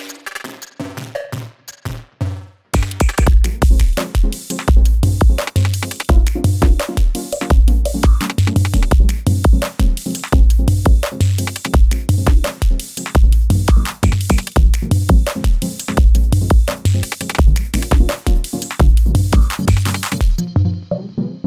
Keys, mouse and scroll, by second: 0.4 ctrl+alt+Home, 1.7 click, 3.1 g, 8.7-21.4 drag.